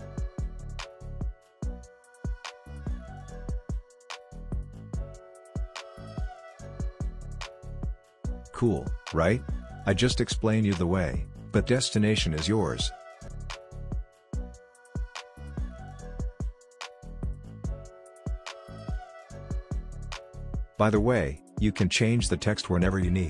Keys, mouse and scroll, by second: 0.7-4.7 drag, 4.7 space, 6.8-10.8 drag, 10.8 space, 13.3 click, 17.8-21.3 drag.